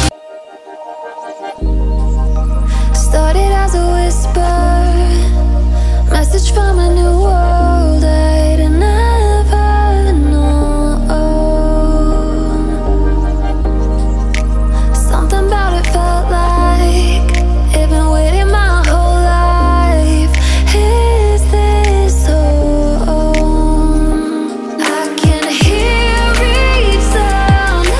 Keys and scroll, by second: 23.6 ctrl+a.